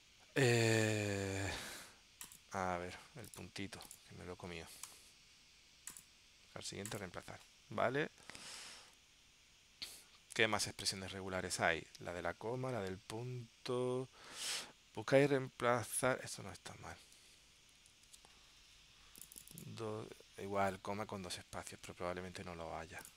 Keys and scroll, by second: 8.7 super+Tab, 10.6 super+Tab, 17.3 super+z, 18.1 super+s, 21.8 super+Tab.